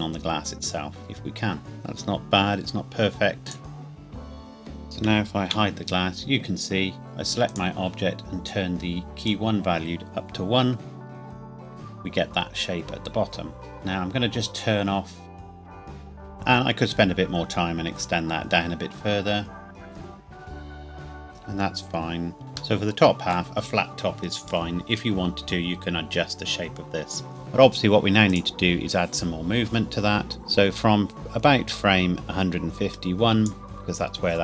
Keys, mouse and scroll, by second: 1.6 click, 2.7-3.1 scroll up 1, 3.5 alt+click, 3.6 s, 3.8-4.3 scroll down 2, 3.9 click, 4.3 click, 4.7 a, 4.8 z, 5.3 click, 5.5 h, 7.5 click, 9.6 click, 15.2 click, 15.6 Tab, 15.8 shift+click, 16.0 alt+h, 16.1 click, 16.2 middle click, 17.8 Tab, 19.5 click, 19.6 Tab, 19.8 shift+middle click, 20.0 g, 20.1 scroll up 2, 20.2-20.6 scroll down 1, 20.7 s, 20.9 KP_Enter, 21.0 click, 21.2-21.6 scroll down 2, 21.6 shift+middle click, 22.4 click, 22.8 middle click, 26.4-26.9 scroll up 1, 28.3 click, 30.3 click.